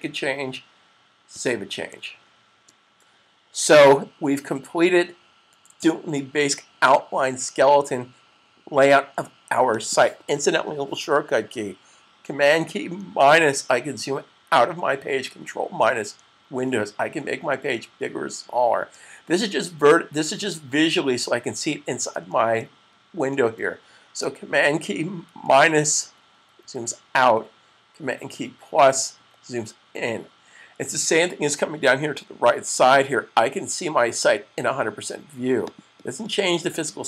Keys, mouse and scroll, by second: 1.1 super+s, 2.4-3.4 typing, 9.5 click, 12.5 super+click, 25.8 super+-, 26.2 super+-, 26.5 super+-, 29.0 =, 29.5 =, 32.7 click, 35.3 typing.